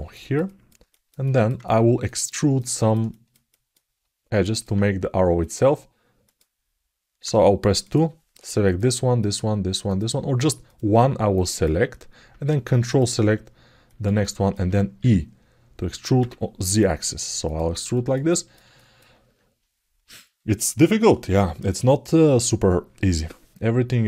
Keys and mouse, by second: 0.2 ctrl+alt+middle click, 0.6 alt+shift+middle click, 1.0 alt+middle click, 1.4 ctrl+alt+middle click, 2.1 alt+shift+middle click, 2.5 ctrl+alt+middle click, 2.9 alt+shift+middle click, 3.3 alt+middle click, 4.2 ctrl+alt+middle click, 5.2 click, 6.0 click, 7.6 click, 8.4 shift+click, 9.0 shift+click, 10.4 click, 11.3 click, 12.6 ctrl+click, 13.6 alt+middle click, 14.0 ctrl+alt+middle click, 17.7 alt+middle click, 18.0 ctrl+alt+middle click, 18.5 alt+shift+middle click.